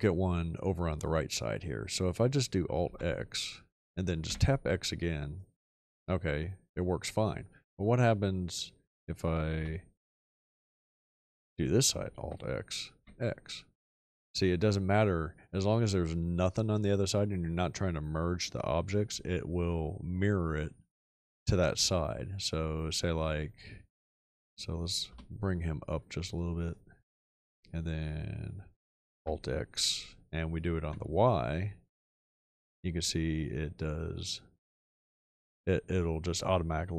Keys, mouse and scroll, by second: 2.8 alt+x, 4.3 x, 5.3 click, 9.6 x, 11.0 click, 12.1 alt+x, 13.0 x, 21.2 click, 22.3-23.0 scroll down 5, 25.1 g, 29.1 alt+x, 30.8 y.